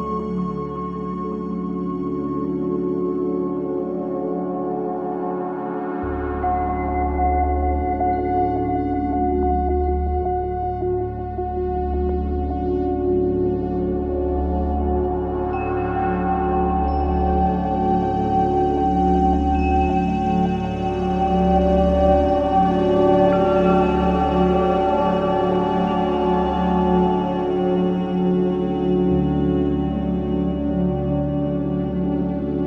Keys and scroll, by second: 3.9 ctrl+KP_0, 18.2 ctrl+z, 19.4 ctrl+3, 19.6 ctrl+space, 25.5 ctrl+shift+], 26.5 shift+], 27.7 ctrl+alt+KP_3, 28.7 space, 29.8 ctrl+v.